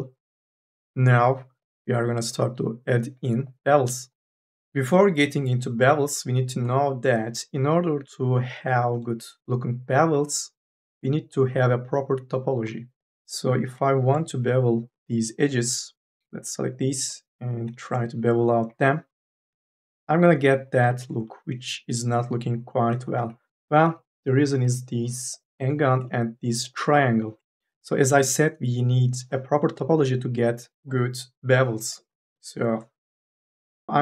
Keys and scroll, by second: 13.3 2, 13.6 e, 18.4 m, 18.7 s, 23.1 ctrl+z, 23.5 1, 23.7 e, 24.3 3, 24.5 e, 27.6 1, 33.3 1, 33.9 m.